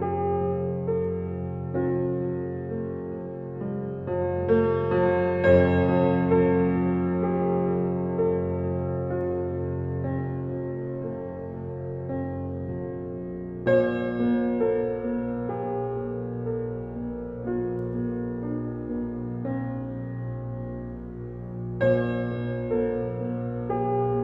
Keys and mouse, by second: 1.4-2.5 drag, 5.5-6.7 drag, 8.5 click, 9.0 click, 10.7 f, 11.4 click, 12.0 click, 13.2 click, 13.8 click, 14.3 click, 16.0 f, 17.5 click, 18.2-19.3 drag, 19.8 click, 20.3 typing, 22.6 alt+click, 23.3 alt+click.